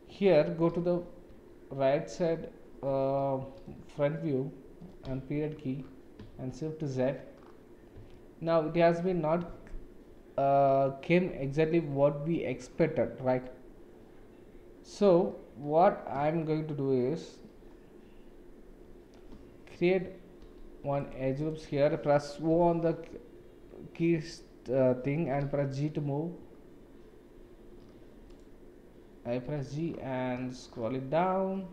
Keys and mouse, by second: 0.7 KP_1, 1.3 KP_3, 3.7 KP_1, 5.0 KP_Decimal, 6.3 shift+z, 8.1 shift+click, 20.4 ctrl+r, 22.5 o, 29.4 g.